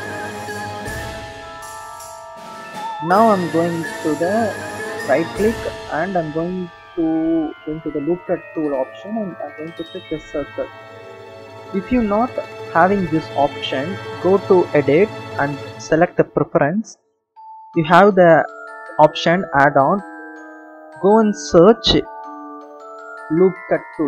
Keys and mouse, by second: 3.7-10.2 right drag, 14.9-16.9 drag.